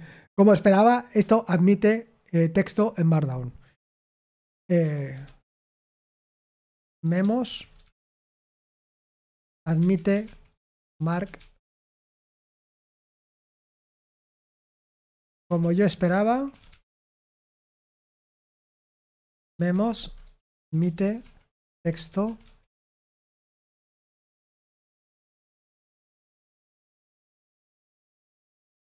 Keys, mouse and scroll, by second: 7.5-23.3 typing, 26.1-27.6 typing.